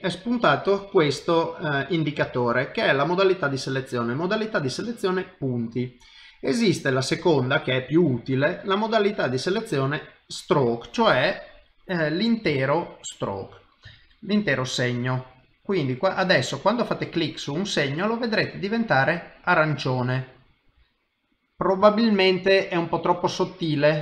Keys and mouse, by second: 10.4 click, 12.0 click, 12.7 ctrl+middle click, 13.5 middle click, 13.9 shift+middle click, 15.7 click, 17.0 click, 22.6 click, 22.6 shift+middle click, 23.9 middle click.